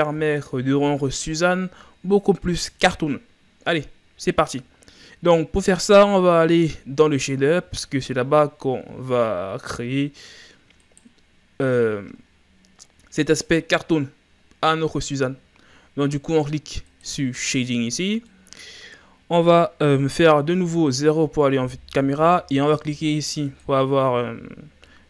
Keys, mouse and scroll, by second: 0.3-3.4 shift+scroll up 4, 11.0-13.8 right drag, 17.2-18.3 drag, 18.3-20.5 middle drag, 20.5 KP_0, 23.5-25.0 drag.